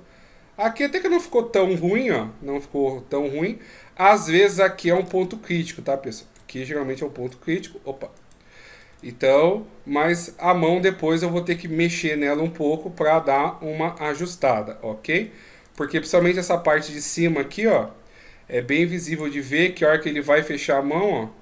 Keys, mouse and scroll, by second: 5.0 d, 6.7 right click, 6.8 d, 8.2 right click, 8.9 d, 9.0 right click, 10.1 d, 10.4 scroll down 4, 11.1 middle click, 11.8 shift+scroll down 1, 12.5-13.2 scroll up 6, 13.2 middle click, 15.6 right click, 17.8 scroll up 1, 18.4-19.1 scroll up 2, 19.1 click, 19.6 middle click.